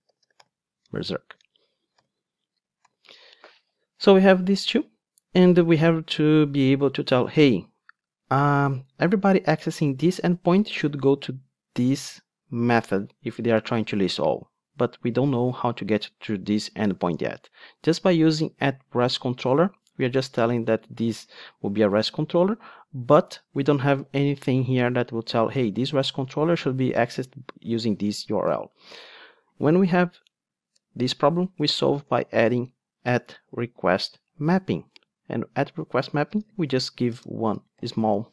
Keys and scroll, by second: 2.9 alt+super+l, 21.3 super+b, 28.6 ctrl+Tab, 34.4 Return.